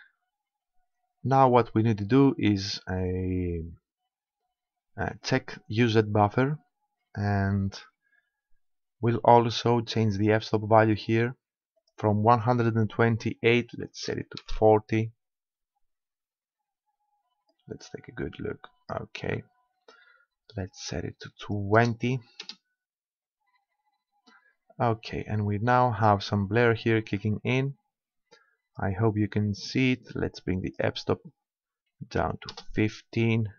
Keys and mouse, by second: 5.3-7.2 drag, 11.8-13.6 drag, 17.5-19.3 drag, 21.5-23.2 drag, 27.2-28.9 drag, 30.7-32.4 drag.